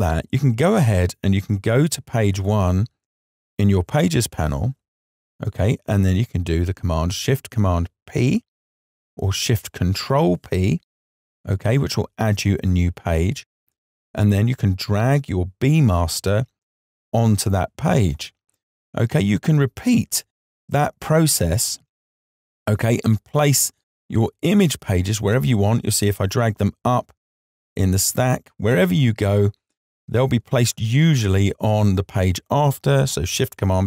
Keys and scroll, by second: 7.4 shift+super+p.